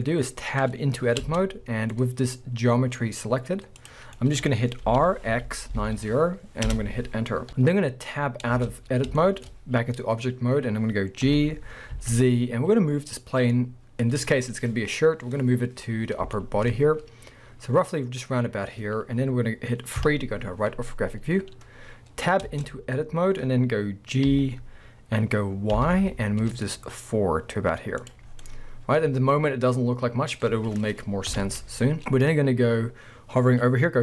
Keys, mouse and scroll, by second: 1.2 Tab, 1.9-3.8 middle drag, 3.8 click, 4.2-11.3 middle drag, 4.8 r, 6.8 Return, 7.5 KP_1, 8.5 Tab, 8.8-9.2 scroll down 2, 11.3 g, 14.1 click, 15.9 scroll up 1, 16.0-20.0 shift+middle drag, 20.0 KP_3, 22.5 Tab, 24.3 g, 28.1 click, 28.3 scroll down 2, 28.4-30.1 middle drag, 31.3 KP_1, 31.9 scroll up 1.